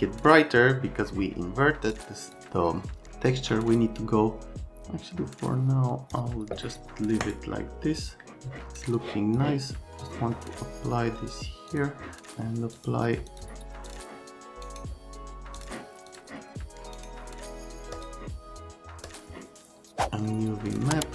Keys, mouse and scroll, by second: 2.0 click, 3.3 click, 4.5 click, 9.1 click, 10.0 click, 11.7 click, 12.8 click, 13.3 click, 13.9 click, 14.7 right click, 15.6 click, 16.1 click, 16.9 right click, 17.9 click, 19.1 click, 20.7 click.